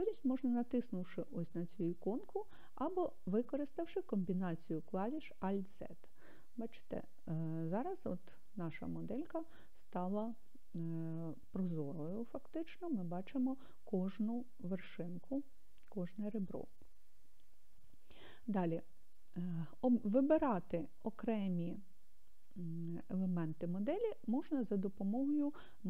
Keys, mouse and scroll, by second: 4.5 click, 11.0 click, 14.6-15.4 scroll up 1, 15.4-17.6 scroll up 1.